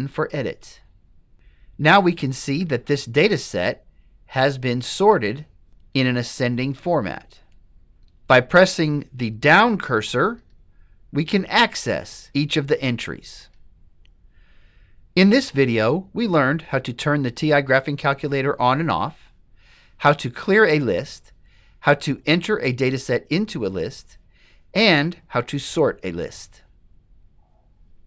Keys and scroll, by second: 0.9 1, 7.2 Down, 7.6 Down, 7.9 Down, 9.0 Down, 9.8 Down, 10.6 Down, 11.3 Down, 12.3 Down, 12.8 Down, 13.6 Down.